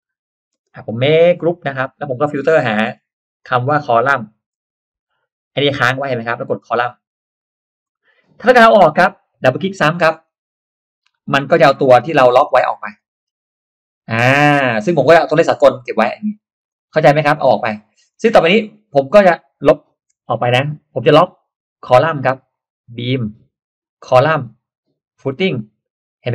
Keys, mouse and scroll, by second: 0.2 click, 0.6 space, 0.6 click, 2.8 click, 3.3 click, 4.6 c, 4.9 o, 7.2 click, 7.9 middle click, 10.0 click, 11.1 click, 11.9 click, 12.9 click, 16.6 click, 19.2 click, 22.4 click, 23.6 click, 25.0 click.